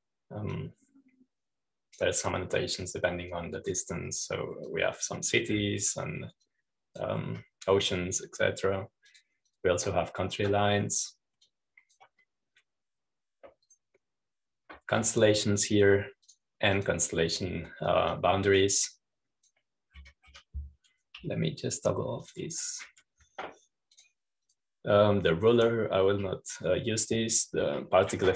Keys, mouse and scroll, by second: 0.0-1.0 scroll up 2, 1.7-6.3 drag, 4.8-5.5 scroll up 2, 5.5 scroll up 1, 6.3-6.9 scroll up 2, 6.9-8.0 drag, 6.9-7.7 scroll up 1, 8.3-9.7 drag, 11.0-13.0 drag, 13.3-14.7 drag, 15.6 click, 18.3-19.5 drag, 20.0-22.1 drag, 24.1 click, 25.9 click.